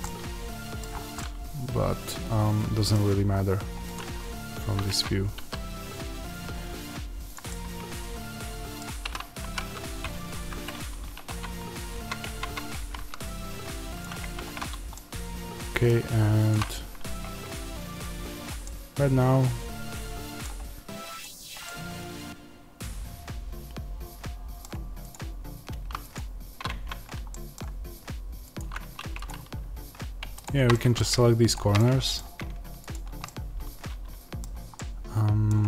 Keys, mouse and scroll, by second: 0.7-1.1 scroll down 1, 3.4-3.9 scroll up 2, 3.9 click, 4.8 Tab, 5.3 s, 7.2 click, 7.4-11.2 middle drag, 9.4 g, 10.4 Escape, 11.2 Tab, 12.7-13.9 middle drag, 12.7 g, 13.9 click, 14.1 Tab, 14.4-14.8 scroll up 2, 14.8-16.4 middle drag, 16.4 click, 17.1 Tab, 18.6-21.1 middle drag, 21.1 click, 21.6-25.6 middle drag, 25.6 Tab, 26.1 click, 26.6 Tab, 27.3-28.7 middle drag, 28.7 1, 29.2 click, 30.6 middle click, 31.5 shift+click, 32.8 shift+click, 33.2-35.6 middle drag.